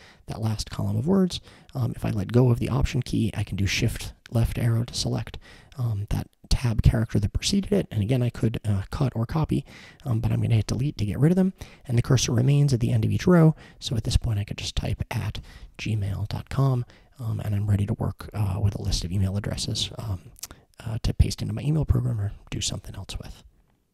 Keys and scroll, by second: 3.5 shift+Left, 10.6 BackSpace, 15.0-16.7 typing, 18.6 typing, 22.3-23.0 typing.